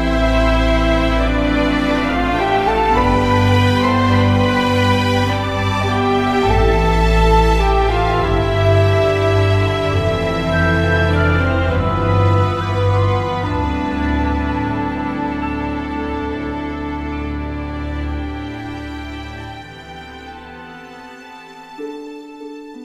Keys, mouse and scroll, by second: 4.4 Tab, 8.3 middle click, 8.7 KP_1, 10.4 Tab, 10.6 click, 11.7 ctrl+Tab, 12.9 ctrl+Tab, 14.8 s, 17.1-18.7 drag, 17.8 s, 18.7 KP_1, 21.3 Tab, 22.4 KP_1.